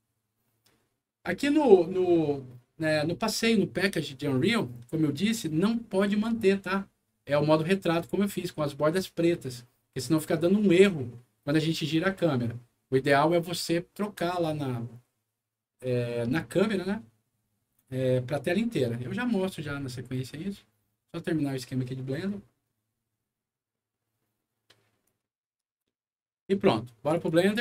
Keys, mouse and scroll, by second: 24.9 click, 27.1 click.